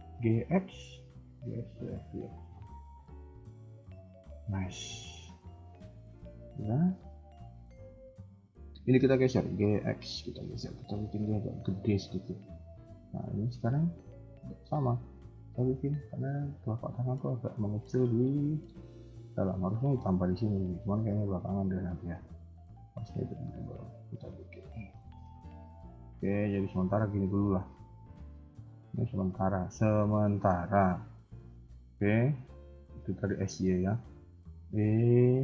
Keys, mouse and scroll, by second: 0.0 g, 4.6-5.0 scroll down 3, 4.8 middle click, 5.2-5.8 scroll up 3, 5.3 KP_1, 5.8 shift+middle click, 6.1-6.6 scroll up 2, 6.6 click, 9.3 g, 12.5 click, 12.8 KP_1, 13.5 scroll down 2, 13.5 KP_1, 13.7 middle click, 15.3 shift+click, 16.3 shift+click, 16.7 shift+click, 16.9 KP_3, 17.6 KP_1, 18.4 shift+middle click, 21.8 g, 24.6 shift+middle click, 25.3 alt+click, 25.7 scroll down 2, 25.9 shift+middle click, 26.5 r, 27.7 KP_3, 29.1 s, 32.9 shift+middle click, 33.4-34.2 scroll up 1, 34.2 e.